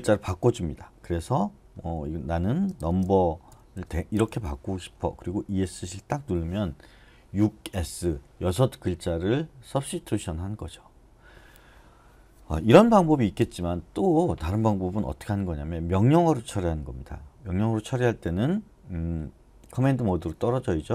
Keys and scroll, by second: 2.8-4.8 typing, 6.0 Escape, 13.4 typing, 19.8 typing.